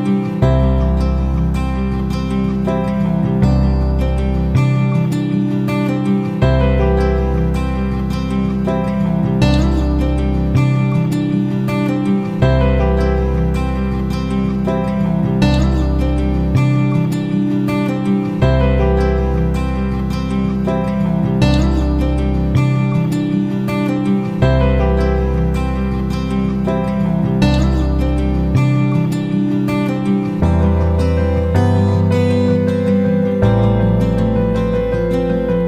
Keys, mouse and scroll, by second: 5.7-13.0 drag, 13.5 click, 22.8 F9, 25.7-34.7 drag.